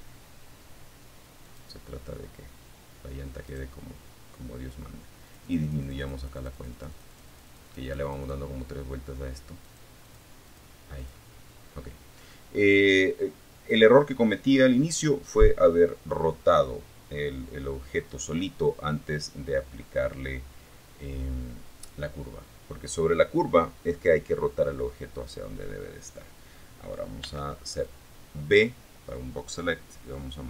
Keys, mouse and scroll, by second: 1.6 right click, 3.4-6.6 drag, 7.8 click, 8.2 click, 8.6 click, 9.2 click, 25.4 b, 26.0 click, 29.2 m, 29.4 1.